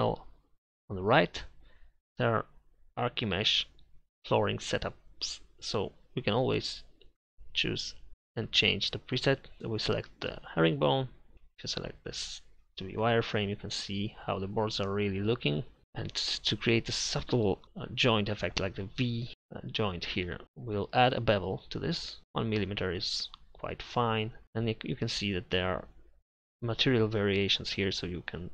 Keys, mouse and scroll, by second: 11.3 z.